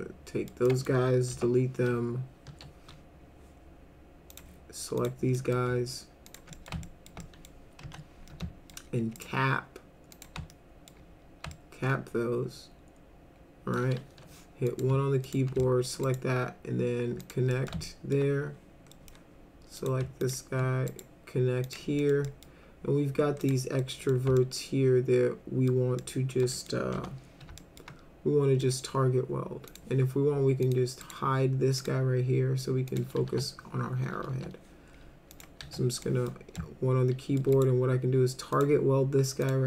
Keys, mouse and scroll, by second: 0.6 alt+middle click, 1.3 Delete, 2.5 1, 4.3 click, 5.0 click, 5.3 middle drag, 6.3 ctrl+click, 6.5 middle click, 6.8 alt+middle click, 7.2 middle click, 7.8 F3, 8.3 alt+middle click, 9.2 right click, 10.1 click, 10.5 alt+middle click, 11.5-13.7 alt+middle drag, 14.0 1, 14.7 click, 15.2 ctrl+click, 15.6 alt+middle click, 16.0 right click, 17.2 click, 17.5 middle click, 17.9 alt+middle click, 18.9 middle drag, 19.8 click, 20.2 ctrl+click, 20.9 right click, 21.7 click, 22.0 middle click, 22.3 middle click, 23.4 click, 23.8 middle click, 24.4-25.7 alt+middle drag, 26.0 alt+middle click, 26.5 middle click, 26.9 F3, 27.6 alt+middle click, 28.6 middle click, 29.7 click, 30.6 click, 31.0 right click, 31.8 click, 32.9 click, 33.3 1, 34.3 1, 35.3 click, 35.6 1, 36.0 middle drag, 36.6-37.4 alt+middle drag, 37.5 right click, 38.5 click, 39.4 click.